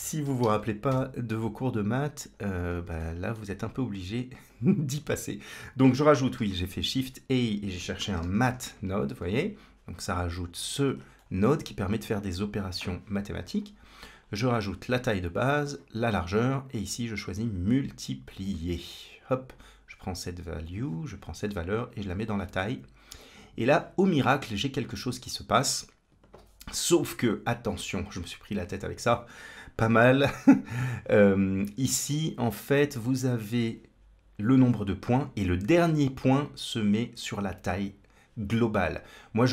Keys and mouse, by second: 2.8 middle click, 4.3 click, 6.2 shift+a, 10.1 click, 11.0 middle click, 14.0-15.1 drag, 15.9-16.6 drag, 16.9-18.3 drag, 19.3-22.4 drag, 29.8-31.1 d, 30.8-34.1 right drag.